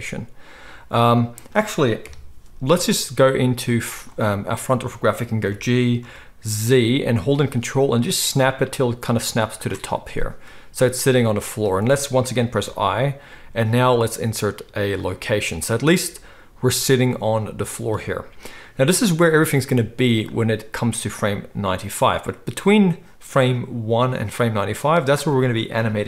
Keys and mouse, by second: 2.0 KP_1, 3.7 z, 5.4 g, 9.6-20.3 ctrl+middle drag, 16.0 z, 20.3-26.0 drag.